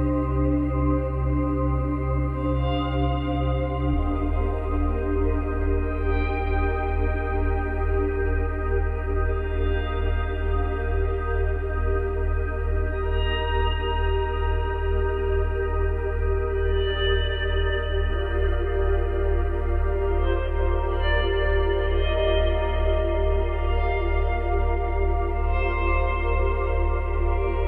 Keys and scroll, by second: 0.5 space, 1.8 space, 5.6 ctrl+c, 5.7 ctrl+v, 21.2 space, 23.4 space.